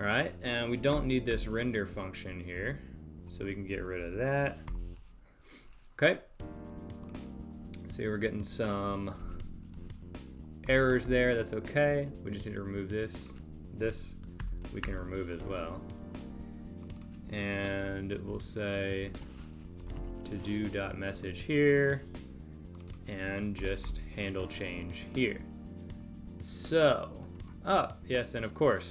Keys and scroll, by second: 0.9 super+BackSpace, 1.9 Down, 3.7 Up, 4.6 super+Delete, 5.4 super+s, 10.7 Delete, 14.5 super+BackSpace, 15.4 super+s, 17.8 Delete, 19.1 alt+shift+Right, 23.6 Delete, 24.5 super+s.